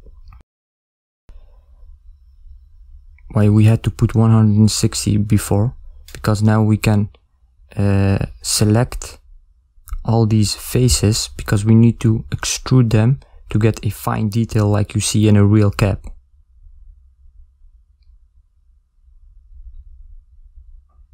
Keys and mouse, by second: 0.0 shift+click, 0.1 shift+click, 0.2 shift+click, 0.4 shift+click, 0.5 shift+click, 0.6 shift+click, 0.7 shift+click, 0.9 shift+click, 1.1 middle click, 1.2 ctrl+middle click, 1.4 middle click, 1.6 shift+click, 1.7 shift+click, 1.9 shift+click, 2.1 shift+click, 2.2 shift+click, 2.3 shift+click, 2.5 shift+click, 2.6 shift+middle click, 2.7 middle click, 3.0 shift+click, 3.1 shift+click, 3.3 shift+click, 3.4 shift+click, 3.5 shift+click, 3.6 shift+click, 3.7 shift+click, 3.8 middle click, 4.2 shift+click, 4.4 shift+click, 4.6 shift+click, 4.7 shift+click, 4.8 shift+click, 5.0 shift+click, 5.1 shift+click, 5.3 middle click, 5.4 shift+click, 5.6 shift+click, 5.7 shift+click, 5.9 shift+click, 6.0 shift+click, 6.1 shift+click, 6.2 ctrl+middle click, 6.3 middle click, 6.6 shift+click, 6.9 shift+click, 7.0 shift+click, 7.2 shift+click, 7.3 shift+click, 7.4 shift+click, 7.6 shift+click, 7.7 shift+click, 7.8 middle click, 8.2 shift+click, 8.5 shift+click, 8.7 shift+click, 8.8 shift+click, 8.9 shift+click, 9.1 shift+click, 9.2 shift+click, 9.5 shift+click, 9.7 shift+click, 10.1 middle click, 10.2 shift+click, 10.4 shift+click, 10.6 shift+click, 10.7 shift+click, 10.8 shift+click, 11.0 shift+click, 11.1 shift+click, 11.2 shift+click, 11.4 ctrl+middle click, 11.7 middle click, 14.1 z, 17.0-18.6 middle drag.